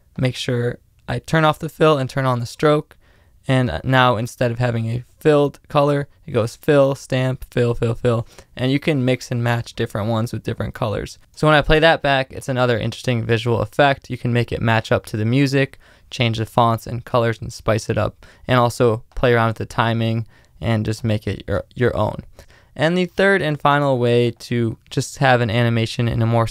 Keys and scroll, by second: 5.7 space, 9.3 space, 11.3 space, 15.4 space, 22.4 space.